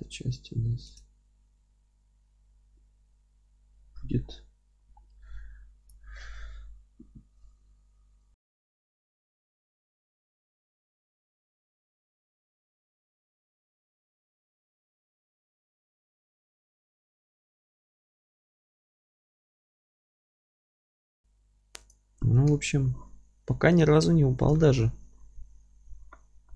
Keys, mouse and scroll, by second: 1.5 Tab, 5.8 click, 6.2-11.7 middle drag, 7.6 Tab, 8.5 a, 8.8 Tab, 11.7-12.2 right drag, 12.2 alt+middle click, 12.5 Tab, 12.7 click, 12.8 scroll down 1, 13.0 Tab, 13.2 alt+middle click, 13.5 click, 14.2 alt+middle click, 14.5 alt+d, 15.1 z, 15.4-17.3 alt+middle drag, 15.6-16.0 scroll up 1, 16.0 g, 17.3 scroll down 1, 17.5 Tab, 17.8-21.5 alt+middle drag, 17.9 Tab, 18.0 scroll down 1, 20.8 scroll down 2, 21.4 scroll up 2, 22.5 KP_7.